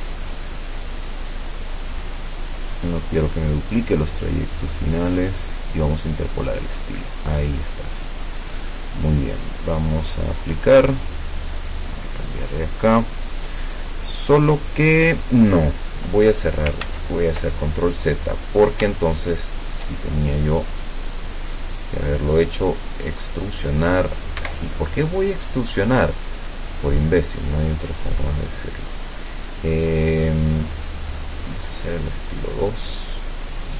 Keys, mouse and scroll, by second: 1.7 click, 5.2 click, 10.4 click, 11.8-15.3 drag, 16.4 ctrl+click, 16.9 ctrl+z, 19.6 shift+click, 20.6 click, 23.2 click, 24.4 Escape, 25.5 click, 28.0 click, 32.0 click, 33.0 click.